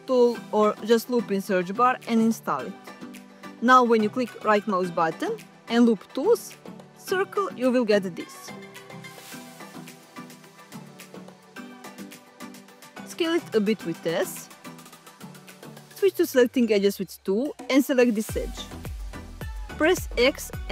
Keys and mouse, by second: 8.0-10.9 right drag, 12.7 s, 16.9 2, 19.2 x.